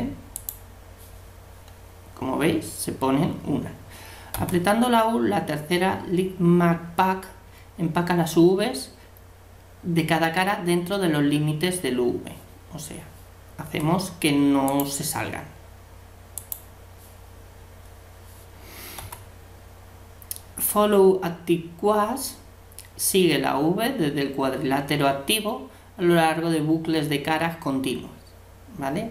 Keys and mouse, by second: 4.3 u, 13.7 u, 19.0 u.